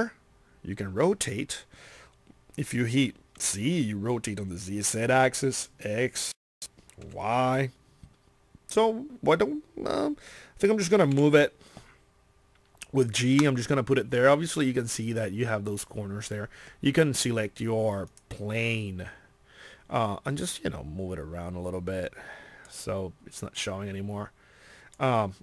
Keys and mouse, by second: 6.6 middle click, 11.1 g, 13.5-14.6 middle drag, 19.2-20.3 drag, 21.8 click.